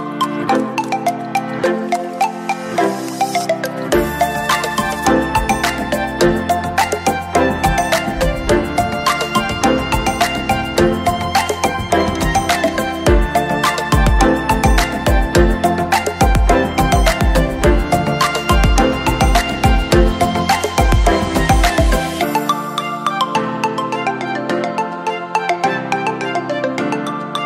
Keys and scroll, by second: 0.3 ctrl+q, 2.7 ctrl+q, 3.1 ctrl+<, 3.9 ctrl+-, 6.6 ctrl+-, 7.6 ctrl+j, 12.3 ctrl+j, 13.2 ctrl+`, 14.3 ctrl+j, 14.9 ctrl+}, 14.9 ctrl+~, 16.9 ctrl+j, 18.7 ctrl+}, 18.8 ctrl+~.